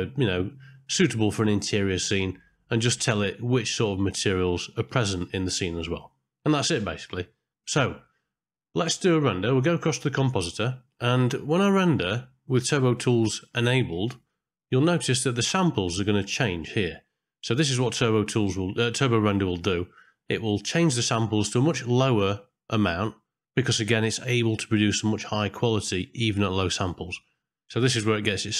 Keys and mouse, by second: 13.3 click, 14.2 click, 14.9 middle click, 17.4 middle click.